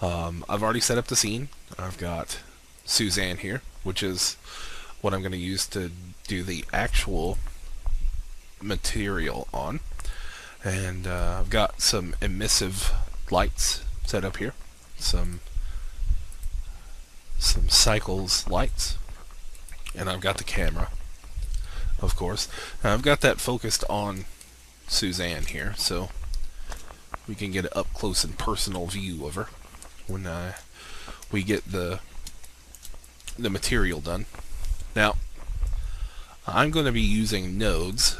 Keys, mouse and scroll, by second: 2.8 right click, 6.4-8.3 drag, 8.7-9.3 scroll down 1, 9.3-11.0 scroll up 1, 11.7-17.4 right drag, 20.5-21.0 scroll up 1, 21.0-21.5 scroll down 1, 21.5 scroll up 1, 23.4 alt+click, 24.4-25.4 scroll up 1, 25.6 alt+shift+click, 28.2-29.2 scroll up 1, 29.2-29.9 scroll down 1, 30.1 alt+click, 30.8 scroll down 1, 31.2 alt+click, 31.7-32.2 scroll up 1, 32.5 alt+shift+click, 35.7-37.7 drag.